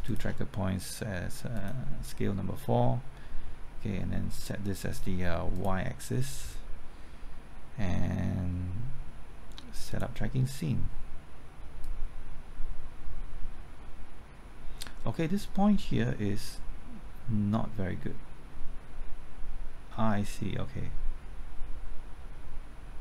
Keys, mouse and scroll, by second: 0.0-23.0 shift+drag.